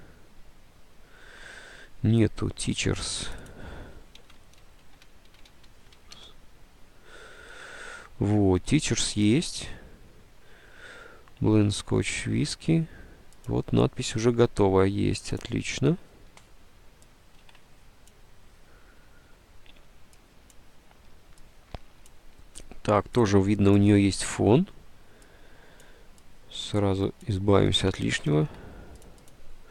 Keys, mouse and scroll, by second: 2.0 alt+Tab, 2.8 Tab, 4.0-6.6 typing, 9.3 alt+Tab, 11.7 alt+Tab, 17.5 alt+Tab, 28.4 ctrl+u.